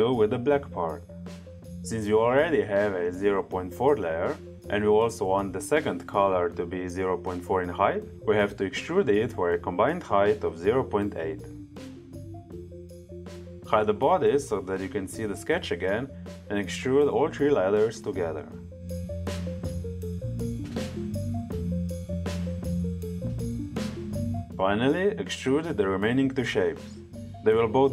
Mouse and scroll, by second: 12.8 click, 13.8 click, 15.0 click, 15.7 click, 17.6 click, 18.3 click, 19.1 click, 23.8 click, 26.8 click.